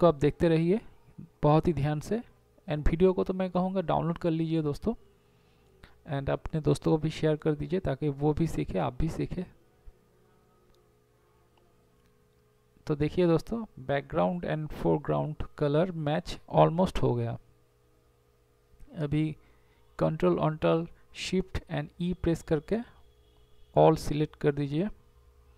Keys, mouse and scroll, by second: 1.6 x, 9.4 ctrl+0, 10.5 z, 14.3 ctrl+alt+shift+e, 15.5 ctrl+s, 20.2 Delete, 21.2 b, 22.8 ], 25.1 ctrl+z.